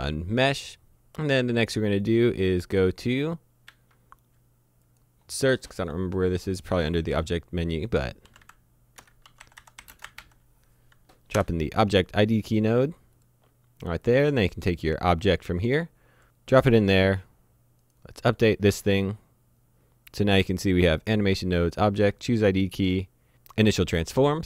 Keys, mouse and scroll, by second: 2.1 click, 3.7 a, 4.9 click, 8.3-10.2 typing, 11.4 Return, 13.2 click, 14.8 click, 16.2 Escape, 17.9 click, 21.9 click.